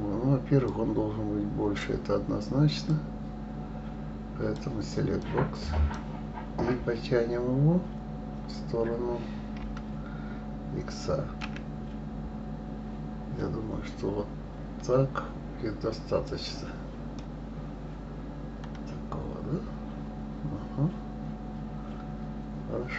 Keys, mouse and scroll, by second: 0.6 click, 2.8-5.3 drag, 9.6 g, 17.2-20.2 middle drag.